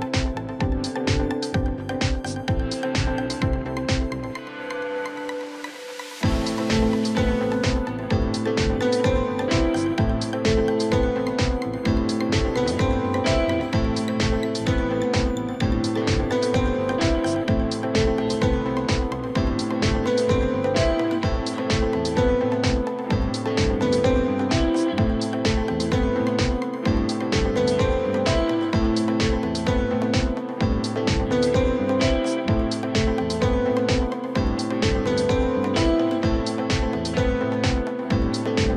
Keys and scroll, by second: 4.0 ctrl+j, 11.9 ctrl+e.